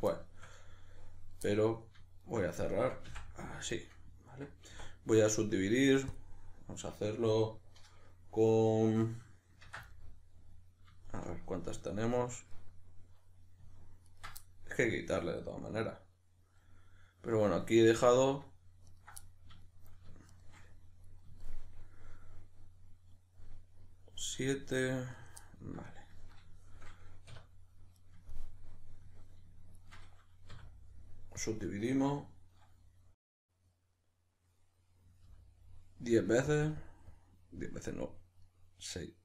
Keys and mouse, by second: 2.2 shift+right click, 3.1 f, 3.8-12.6 middle drag, 4.8 w, 12.6 right click, 14.1 ctrl+right click, 14.4-17.8 middle drag, 17.8 right click, 18.9 ctrl+right drag, 19.2-20.3 middle drag, 20.3 shift+right drag, 21.4-25.1 shift+middle drag, 25.1 right click, 25.4-29.8 middle drag, 27.3 \, 29.8 shift+right click, 30.6 w, 33.9-36.6 middle drag, 35.2 F9, 36.6-39.2 drag.